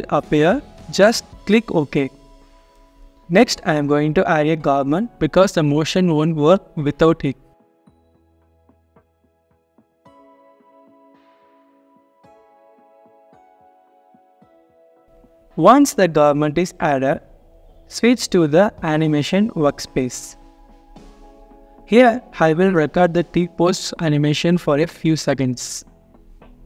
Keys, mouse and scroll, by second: 0.6-1.2 scroll down 1, 1.2 typing, 1.4 alt+click, 2.7 scroll down 1, 2.8 double click, 9.4 alt+click, 15.5 alt+click, 16.2 alt+middle click, 19.0 scroll down 1, 19.2 alt+click, 20.8 alt+middle click, 21.2 scroll up 1.